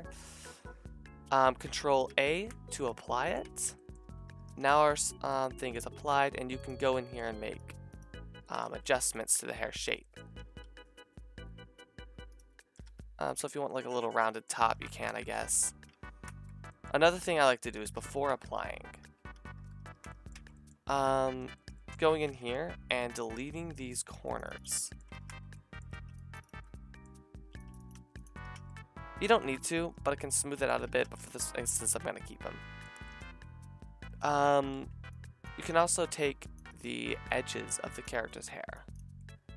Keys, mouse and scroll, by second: 2.1 ctrl+a, 3.4 Tab, 4.0-5.1 typing, 6.6 middle click, 6.9 click, 7.3 a, 8.6 c, 9.3 g, 10.0 click, 10.4 g, 12.8 g, 13.4 Tab, 14.7 ctrl+z, 14.9 ctrl+z, 15.5 a, 16.0 ctrl+z, 16.5 Tab, 17.4 ctrl+z, 17.8 ctrl+z, 17.9 ctrl+z, 18.1 ctrl+z, 18.3 ctrl+z, 18.5 ctrl+z, 18.8 ctrl+z, 19.0 ctrl+z, 19.4 ctrl+z, 19.6 ctrl+z, 20.3 Tab, 20.5 click, 21.4 shift+middle click, 21.6 click, 22.0 middle click, 22.3 c, 24.1 c, 24.6 middle click, 25.1 ctrl+z, 25.9 c, 27.5 c, 27.9 x, 28.2-29.5 middle drag, 28.5 Tab, 29.8 a, 30.9 ctrl+z, 31.1 ctrl+z, 31.2 ctrl+z, 31.7 a, 33.0-35.7 shift+middle drag, 34.7 c, 37.1 c.